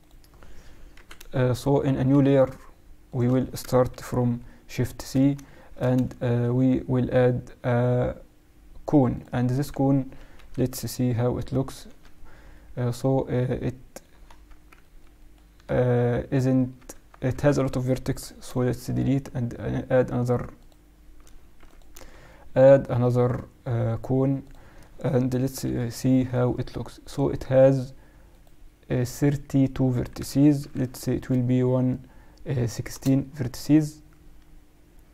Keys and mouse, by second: 0.9 KP_1, 3.0-4.9 drag, 4.2 shift+c, 4.2 shift+v, 4.7 shift+c, 5.5-7.5 middle drag, 6.1 shift+a, 10.3 KP_1, 10.7 KP_Subtract, 12.5-13.9 middle drag, 14.1 Tab, 16.5 Tab, 16.9 Tab, 17.3 Tab, 18.0 x, 18.6 shift+a, 21.5 x, 22.0 shift+a, 25.6 F6.